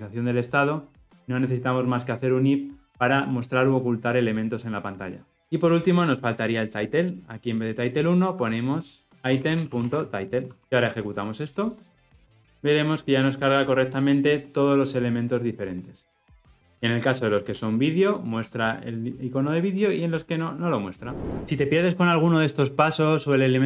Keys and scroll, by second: 10.6 ctrl+alt+o, 11.8 shift+F10.